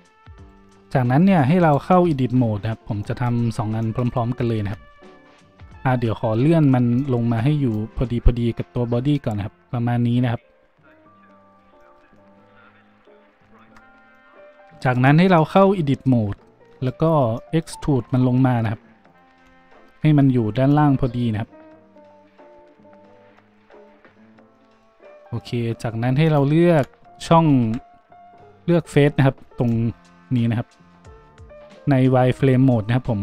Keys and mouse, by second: 0.4 middle click, 0.4 right click, 1.6 shift+middle click, 1.7-9.0 shift+drag, 5.5 Tab, 5.9 Tab, 5.9 `, 11.6-13.2 shift+drag, 13.2 z, 14.3-19.1 drag, 14.3 z, 16.3 Tab, 17.9 e, 19.1-20.7 middle drag, 20.7-33.2 drag, 24.0 z, 27.2 z, 28.7 a.